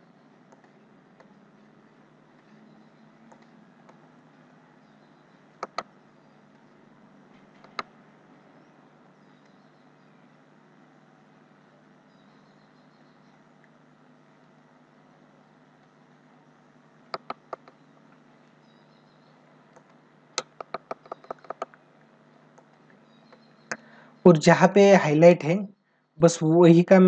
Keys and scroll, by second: 0.2 space, 3.0 space, 5.3 ctrl+alt+z, 7.3 ctrl+alt+z, 16.8 ctrl+alt+z, 19.8 space, 20.3 ctrl+alt+z, 22.5 space, 23.4 ctrl+-, 24.3 space.